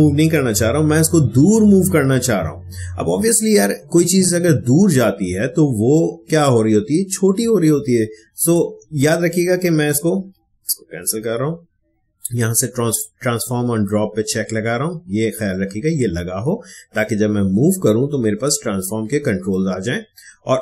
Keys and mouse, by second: 3.5-9.5 drag, 9.5 ctrl+z, 10.4 Escape, 13.1-16.5 drag, 16.9-20.6 drag.